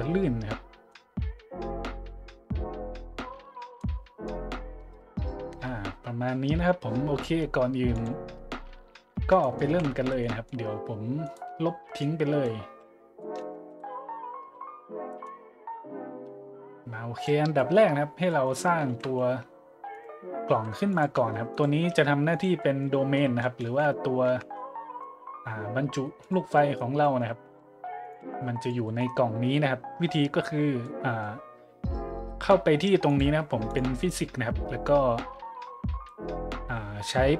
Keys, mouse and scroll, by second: 0.9-1.4 middle drag, 3.4 middle click, 3.8-4.2 middle drag, 7.3 middle click, 7.9 click, 9.4 middle click, 9.7 z, 10.2 middle drag, 11.2 right click, 12.0 click, 12.9-13.5 middle drag, 13.7 Delete, 15.2-17.2 drag, 17.6-17.9 middle drag, 18.0 middle drag, 18.3-18.7 middle drag, 18.9 shift+a, 19.9-20.3 drag, 20.5 s, 20.9-21.3 drag, 21.2 g, 21.5-21.8 drag, 21.9 s, 22.3-22.9 drag, 23.7 `, 24.3 `, 24.9 g, 26.2-26.5 drag, 27.5 s, 28.0 click, 28.2 g, 28.6-28.9 drag, 28.9 middle drag, 30.8-31.2 middle drag, 33.1-33.4 drag, 33.7 click.